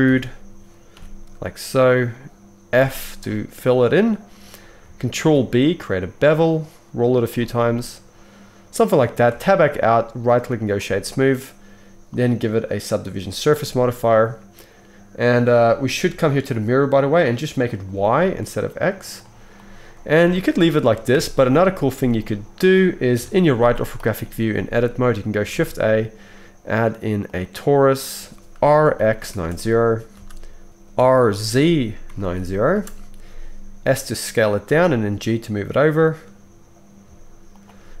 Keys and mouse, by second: 2.8 f, 5.2 ctrl+b, 5.8-8.3 middle drag, 8.7 middle drag, 8.9 middle click, 9.1 click, 9.2 Tab, 9.2-10.2 middle drag, 10.2-14.4 right drag, 12.2-14.4 drag, 12.2-16.6 middle drag, 14.6-15.0 drag, 14.6-15.0 right drag, 16.6-24.5 right drag, 21.1 Tab, 21.9 alt+a, 23.1 KP_3, 23.7 z, 24.5-30.7 shift+drag, 25.5 shift+a, 28.7 r, 30.7-37.9 middle drag, 30.9 r, 33.7 s, 34.6 g.